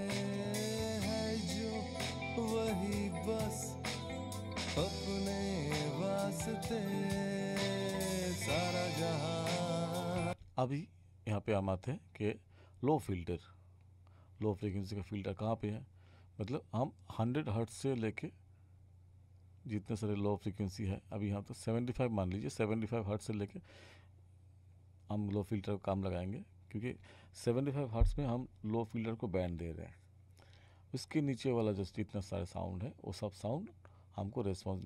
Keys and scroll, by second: 10.2 space.